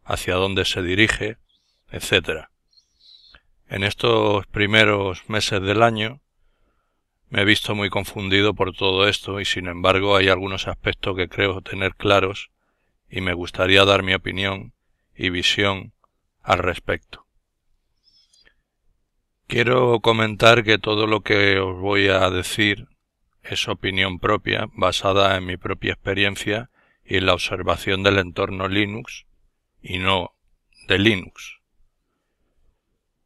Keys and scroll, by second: 1.0 super+Tab, 2.0 super+Tab, 3.1 super+Tab, 4.1 super+Tab, 18.1 super+F4, 22.5 alt+F4.